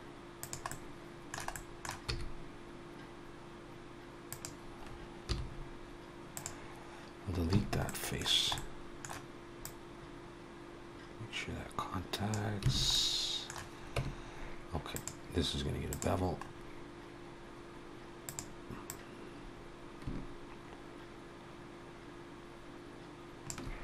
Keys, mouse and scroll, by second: 0.5 middle click, 1.4 middle click, 1.9 e, 5.4 x, 7.7 middle click, 7.7 a, 8.4 middle click, 9.5 click, 12.7 alt+a, 12.7 middle click, 13.8 Tab, 14.8 click, 16.2-16.6 scroll up 2, 18.1 click, 19.0 click.